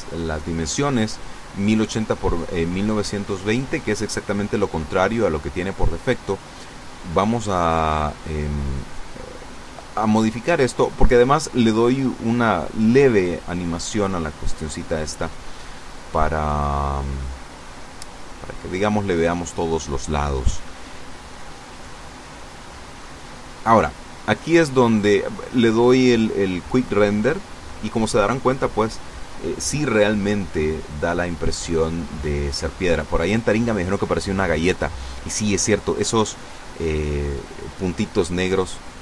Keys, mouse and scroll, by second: 0.2-1.8 typing, 1.0 Tab, 2.0 KP_Enter, 3.9 right click, 6.0 g, 9.5 click, 13.3 click, 14.6 r, 17.0 click, 18.2 g, 18.4 click, 20.9 click, 22.2 g, 23.0 click, 24.6 F12, 31.2 scroll down 2, 38.7 Escape.